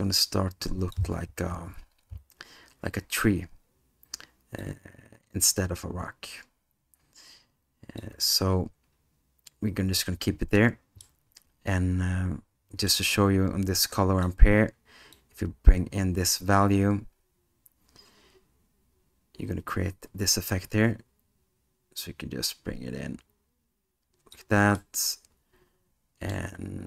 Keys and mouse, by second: 4.6-8.0 drag, 11.2-12.9 middle drag, 13.9 click, 15.2-24.4 drag, 24.9-26.4 middle drag.